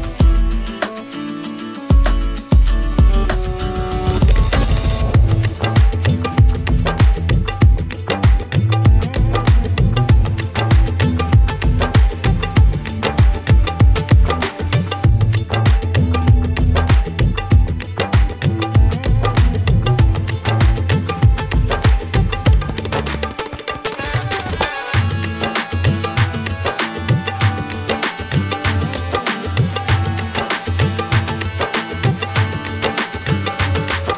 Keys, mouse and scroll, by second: 0.3 click, 1.3 click, 1.5-2.4 typing, 2.5 click, 2.7 click, 2.8 click, 2.9 click, 3.3 click, 3.4 click, 3.4 click, 3.7 click, 3.8 click, 4.1 click, 4.3 click, 5.3 click, 6.4 click, 6.9-7.3 typing, 8.4 scroll, 9.4 alt+middle click, 10.4 click, 10.9-12.0 typing, 14.1 alt+middle click, 15.4 click, 17.4 middle click, 17.6 click, 19.1 alt+middle click, 19.8 click, 20.6 ctrl+j, 21.7 click, 22.6 click, 23.3 ctrl+h, 24.3 click, 24.5-24.9 scroll, 27.1 scroll, 31.3 alt+middle click, 32.1 click, 32.6 shift+click.